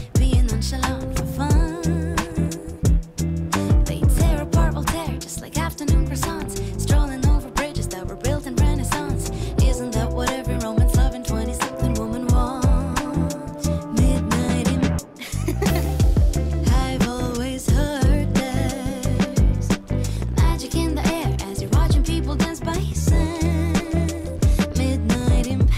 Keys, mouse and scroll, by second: 0.0 click, 0.3-1.6 middle drag, 1.6 click, 2.0-3.9 middle drag, 3.9 Tab, 5.4 1, 6.7-7.0 scroll up 1, 7.1-8.9 middle drag, 8.9 click, 10.1 click, 12.9 Delete, 14.5-15.9 middle drag, 15.9 click, 17.7-18.7 middle drag, 18.7 click, 21.5 g.